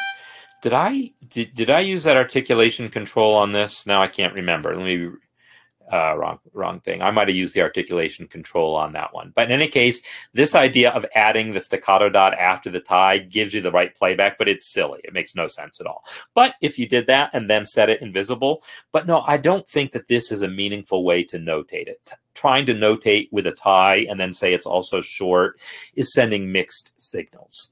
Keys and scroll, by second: 0.1 space, 4.8 ctrl+F10.